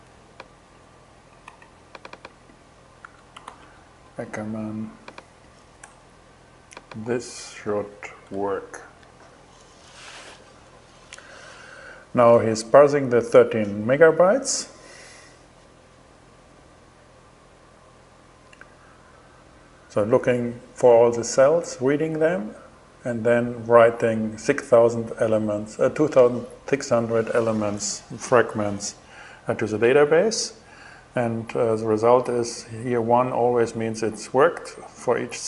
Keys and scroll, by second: 1.0 super+c, 2.6 shift+2, 3.0 shift+super+v, 5.4 BackSpace, 7.2 BackSpace, 7.8 shift+BackSpace, 7.9 shift+Return.